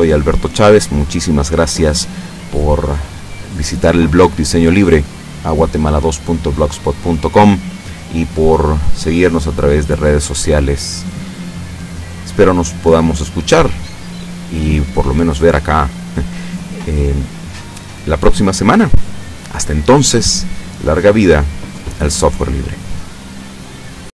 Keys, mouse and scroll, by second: 15.4-17.7 middle drag.